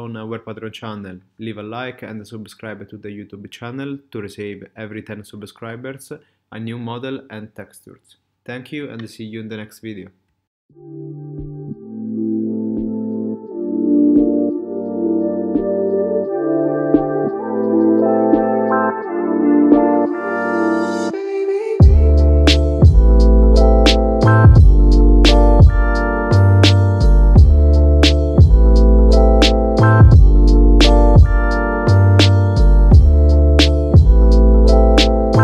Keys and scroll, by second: 14.3 space, 15.2 space, 23.3 super+z.